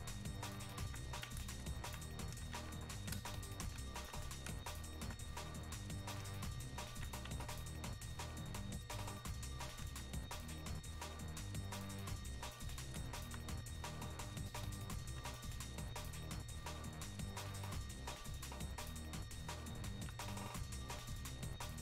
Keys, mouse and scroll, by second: 1.8 alt+click, 4.0 alt+click, 5.6-7.6 drag, 7.6-17.9 alt+drag, 18.5-21.8 drag.